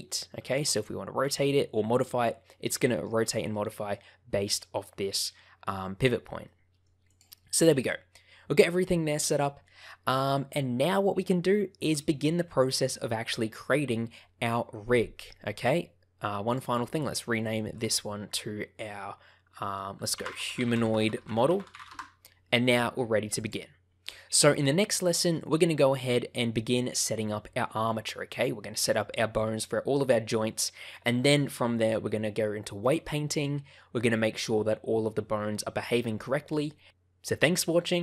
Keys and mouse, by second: 0.5 r, 1.2 click, 2.6 middle click, 3.5 middle click, 6.4 middle click, 7.0 click, 7.3 middle click, 8.5-9.6 middle drag, 10.0-11.9 middle drag, 16.6-22.3 drag, 24.1-25.3 middle drag, 28.0 middle click.